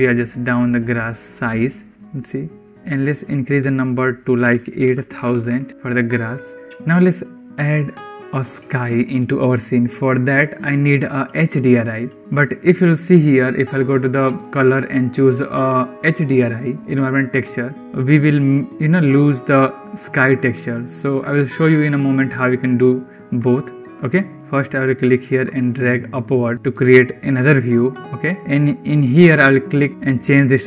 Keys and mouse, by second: 2.9-5.7 drag, 5.1 0, 5.3 0, 6.5 ctrl+s, 14.2-17.3 drag, 24.3 n, 25.1-26.5 drag, 26.7-27.2 shift+drag, 28.2 click, 29.5 click.